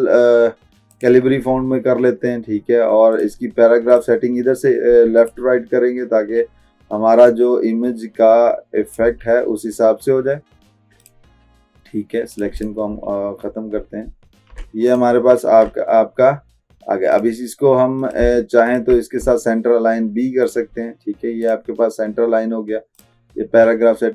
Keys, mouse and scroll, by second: 1.0 click, 3.3-11.3 drag, 7.7-9.3 drag, 14.2 alt+scroll down 2, 14.9 click, 15.9 click, 17.2 click.